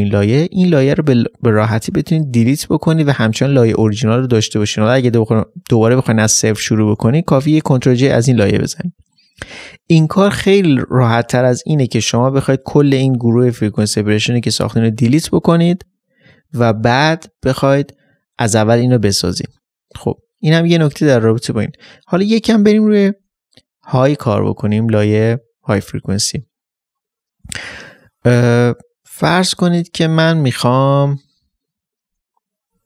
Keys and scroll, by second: 7.4 ctrl+j, 22.1 ctrl+j, 22.2 ctrl+space, 31.3 ctrl+space.